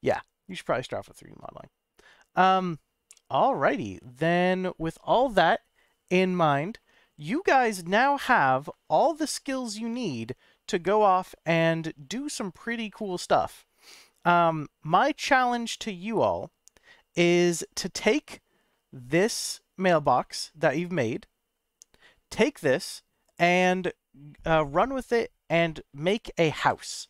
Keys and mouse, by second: 1.0-2.4 middle drag, 3.2-3.6 middle drag, 8.5-8.9 middle drag, 9.6 middle drag, 15.0 click, 17.1-17.8 middle drag, 18.2-18.7 middle drag, 24.3 click, 26.5 shift+a.